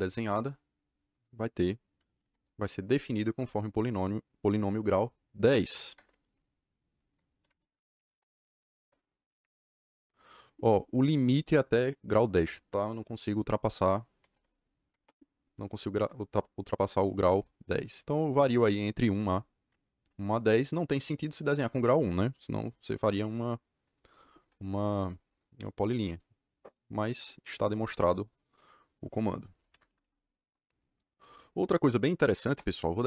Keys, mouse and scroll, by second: 0.0 click, 0.7 click, 1.1 click, 2.1 c, 5.9 KP_Enter, 7.3 d, 8.0 KP_1, 8.4 KP_1, 8.7 KP_Enter, 14.1 KP_2, 14.2 KP_0, 14.9 KP_Enter, 27.9 KP_Enter, 29.7 Escape, 30.0 Escape, 31.9-32.7 typing.